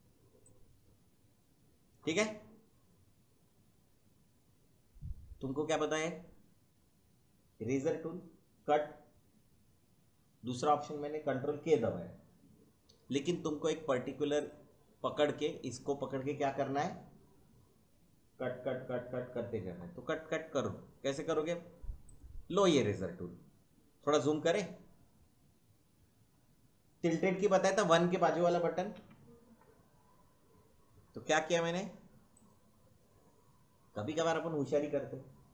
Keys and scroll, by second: 28.9 `.